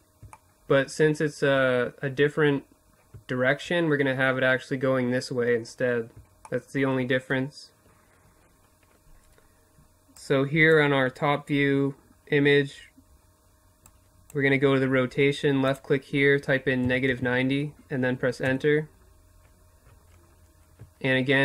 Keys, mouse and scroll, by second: 4.8-8.6 middle drag, 8.6-10.5 drag, 12.3-15.9 drag, 20.8-21.4 drag.